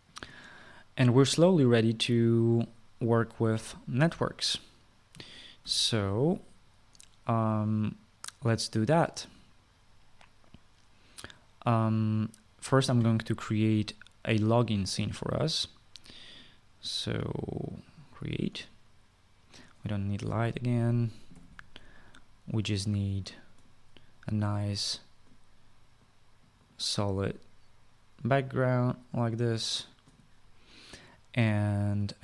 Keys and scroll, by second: 6.3 ctrl+s, 22.0 Delete.